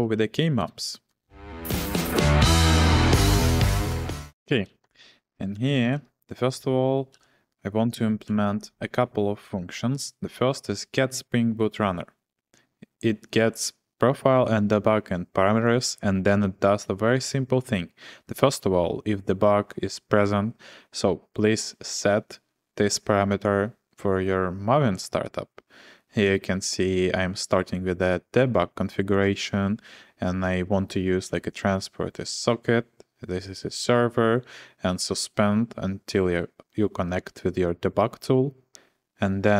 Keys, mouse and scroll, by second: 0.0-0.5 typing, 1.1 Return, 4.3-8.3 typing, 4.7 Return, 4.8 Return.